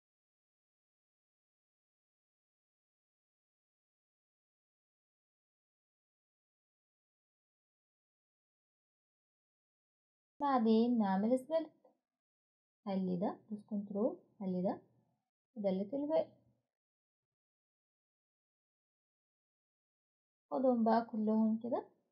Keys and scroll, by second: 16.6 Delete.